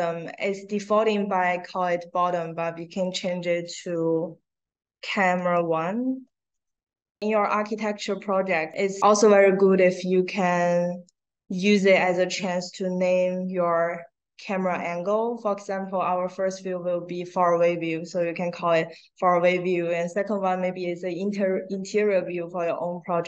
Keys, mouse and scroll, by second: 2.2 click, 2.7 drag, 4.4 a, 5.8 a, 6.4 space, 8.6 click, 12.3-14.6 drag.